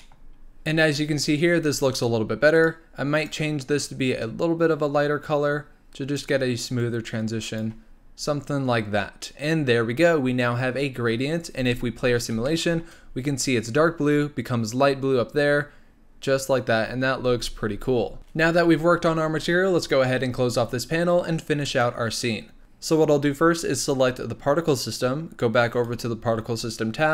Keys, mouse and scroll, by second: 0.0-1.6 middle drag, 1.6 scroll up 3, 2.5 click, 3.1 click, 11.5 space, 12.0-12.5 scroll down 1, 12.5-13.1 shift+middle drag, 13.1-14.0 scroll down 3, 14.0-15.0 scroll down 4, 15.0-16.8 scroll up 2, 16.8 scroll up 1, 17.3 space, 18.2-21.6 middle drag, 21.6-22.6 drag, 25.7 click.